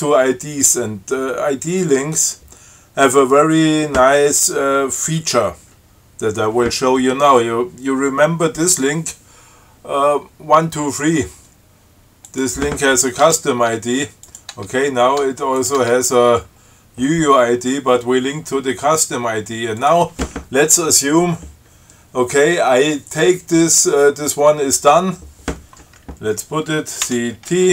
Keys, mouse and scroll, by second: 9.1 click, 12.5 click, 13.5 Tab, 14.5 click, 14.8 Tab, 15.5 Tab, 15.8 click, 16.1 Tab, 20.0 click, 27.3 ctrl+c.